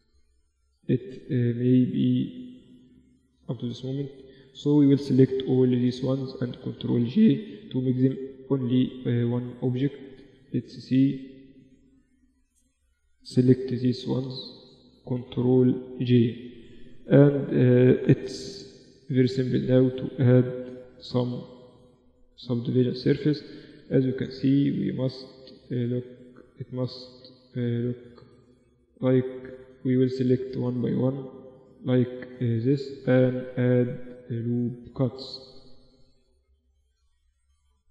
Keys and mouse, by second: 2.0-3.6 drag, 3.0-5.0 typing, 3.6-6.4 middle drag, 6.4 ctrl+j, 7.0 Tab, 7.9 Tab, 8.8-10.1 middle drag, 10.2 a, 10.6 click, 10.6 right click, 11.1-12.4 middle drag, 11.9 a, 13.0 b, 14.1 z, 15.2 ctrl+j, 15.8 Tab, 16.2 a, 16.4 a, 17.8 ctrl+4, 18.4 Tab, 18.8 z, 21.5 middle click, 21.7 middle click, 22.3 Tab, 23.4 ctrl+r, 25.1 ctrl+r, 26.8 ctrl+r, 28.3 Tab, 28.8 Tab, 29.8 ctrl+r, 31.5 ctrl+r, 33.0 ctrl+r, 34.9 ctrl+r, 36.2 ctrl+r, 37.0 ctrl+r.